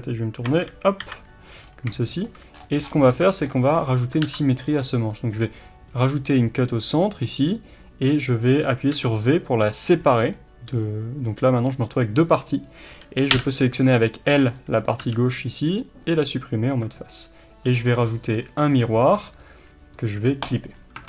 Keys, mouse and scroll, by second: 1.6 scroll up 1, 2.5 scroll down 1, 3.7-4.2 scroll up 1, 4.2 ctrl+r, 5.1 click, 8.9 v, 13.3 l, 16.1 x, 16.7 Tab, 18.8-20.5 drag, 21.0 Tab.